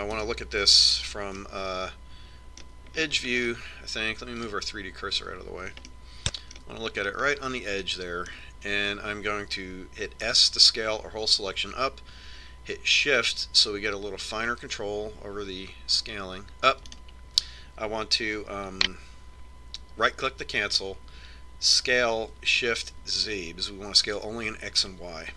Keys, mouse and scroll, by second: 1.9 KP_3, 3.1-4.3 middle drag, 6.2-7.9 drag, 7.9-11.4 middle drag, 12.1 s, 23.8 s.